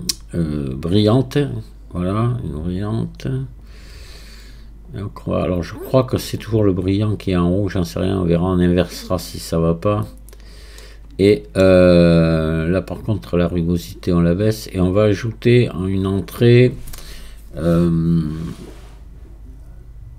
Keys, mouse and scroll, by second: 10.8-12.8 middle drag, 12.8-20.1 drag.